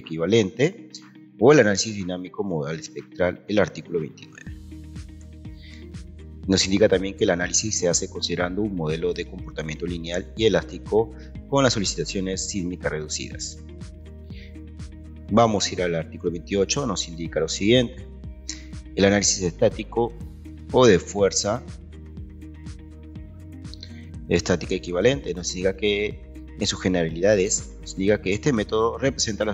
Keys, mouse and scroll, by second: 1.6-2.4 scroll down 1, 2.4-3.4 scroll down 1, 3.4-4.0 scroll down 1, 4.0-5.1 scroll down 1, 5.1 Escape, 5.1-6.4 scroll down 1.